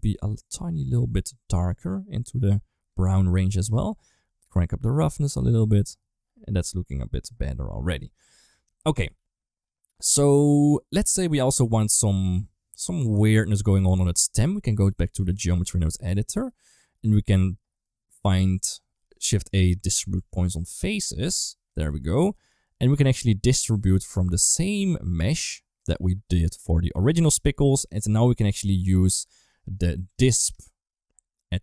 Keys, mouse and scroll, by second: 4.2 click, 9.0 ctrl+s, 11.4 click, 14.6 click, 15.9 middle click, 16.4 middle click, 16.7 middle click, 17.7 middle click, 18.1 middle click, 19.0 shift+a, 21.9 middle click, 22.3 g, 23.8-25.0 drag, 25.6 click, 27.5 click, 27.7 shift+d, 29.0-30.2 drag.